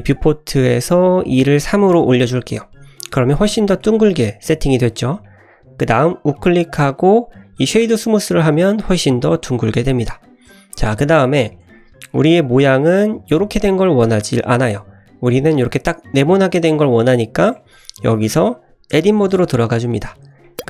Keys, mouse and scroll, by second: 1.2 click, 1.9 click, 2.6-2.9 middle drag, 3.8-4.7 middle drag, 5.0 scroll up 1, 5.2 middle click, 6.2-8.2 right drag, 8.3-8.7 middle drag, 9.4 scroll down 1, 9.5-10.5 middle drag, 10.5 scroll down 2, 11.4 scroll down 2, 11.5 middle drag, 14.6 middle click, 14.9-17.6 scroll down 2, 17.6 middle drag, 18.3 scroll up 1, 19.0 Tab, 20.1 shift+middle click, 20.5 middle click.